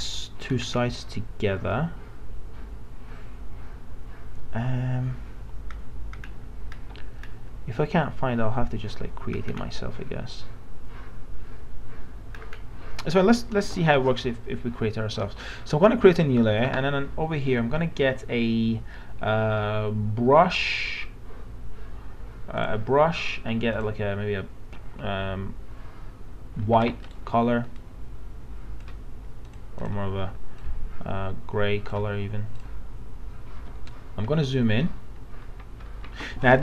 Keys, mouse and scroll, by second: 13.7 alt+Tab, 16.1 click, 27.1 right click, 27.8-32.5 drag, 33.8 alt+scroll up 1, 35.8 alt+scroll up 1.